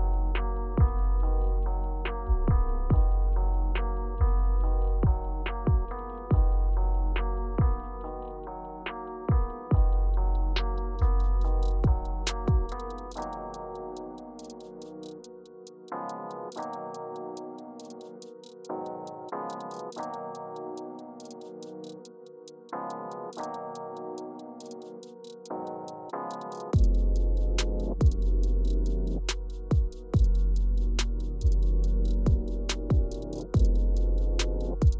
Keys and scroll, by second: 14.2 Tab, 15.0 Return, 16.8 Return, 18.1 Return, 23.4 Return, 25.7 Down, 26.0 Page_Down, 27.0 Down, 27.5 Up, 27.9 Up, 29.0 Up, 29.3 Down, 34.6 Left, 34.9 Left.